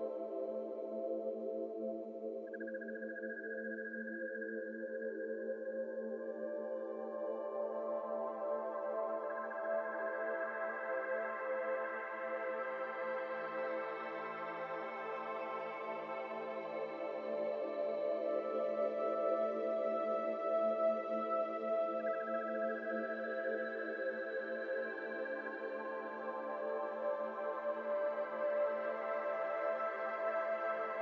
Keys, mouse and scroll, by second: 0.2 shift+middle drag, 0.3-0.7 scroll up 4, 0.7 shift+middle drag, 1.0 Tab, 1.2 shift+middle click, 1.4-1.9 scroll up 4, 1.9 click, 2.5 shift+s, 3.0 shift+a, 4.4 r, 7.6 s, 9.3 s, 10.3 shift+middle click, 10.4-11.0 scroll up 4, 11.1-16.9 typing, 17.1-17.8 scroll down 5, 17.8 shift+middle click, 18.1-19.9 typing, 20.1 scroll down 4, 20.2 Tab, 20.6 alt+z, 20.8-21.6 shift+middle drag, 21.6 Tab, 21.8 shift+middle click, 22.3 f, 22.9 a, 23.1-24.1 middle drag, 24.1 e, 26.4-30.3 typing, 26.8 alt+z.